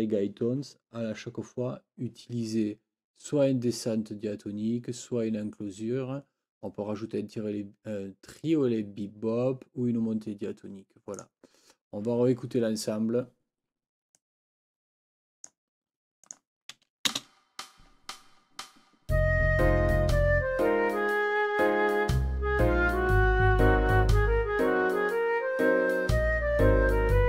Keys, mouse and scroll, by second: 11.2 click, 14.2-15.7 drag, 16.3 click, 17.1 space.